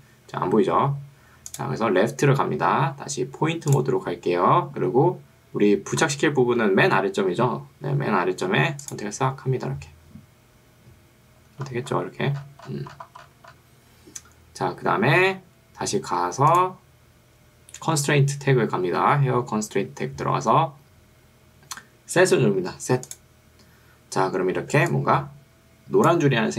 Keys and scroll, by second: 24.8 ctrl+2.